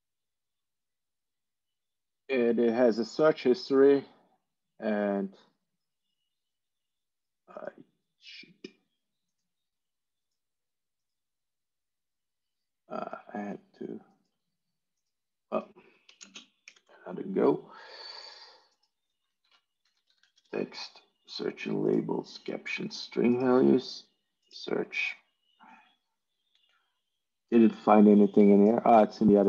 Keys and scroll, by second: 16.1 ctrl+space, 16.5 ctrl+8, 19.8-20.7 typing.